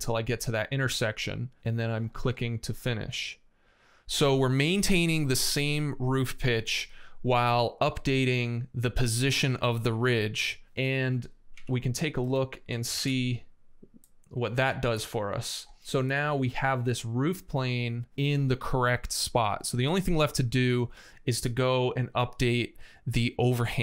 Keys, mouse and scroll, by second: 11.4 x, 12.1 space, 12.7 shift+d, 17.5 scroll up 2.